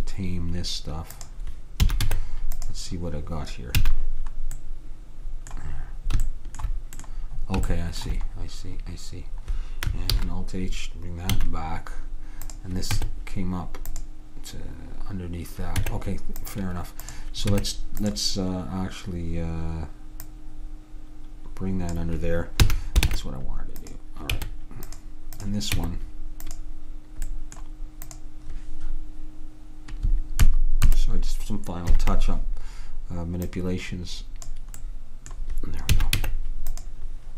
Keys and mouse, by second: 1.9 a, 2.8 Tab, 3.9 a, 10.2 alt+h, 11.4 a, 12.6-14.3 drag, 13.0 Tab, 15.8 Tab, 17.2-19.1 drag, 17.6 Tab, 20.3-22.2 drag, 22.7 a, 23.2 ctrl+Tab, 24.4 Tab, 25.4 click, 25.9 Tab, 29.2 click, 30.5 ctrl+KP_Add, 32.0 ctrl+KP_Subtract, 33.5-34.9 drag, 36.1 a, 36.3 Tab.